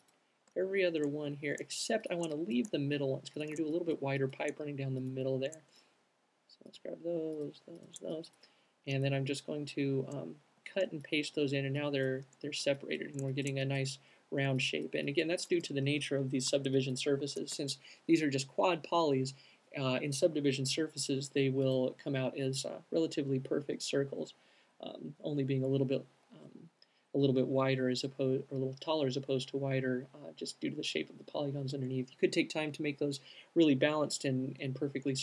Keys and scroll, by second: 10.0 alt+super+x, 10.7 alt+super+v, 12.8-13.5 typing.